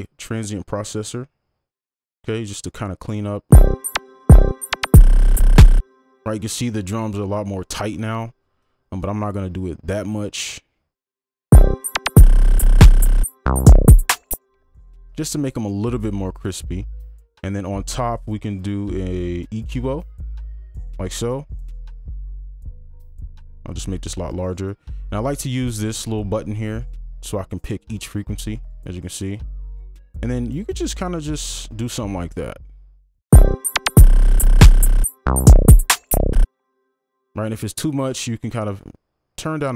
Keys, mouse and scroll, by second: 3.5 space, 15.3 space, 26.1 typing, 27.6 double click, 33.4 space, 36.4 space.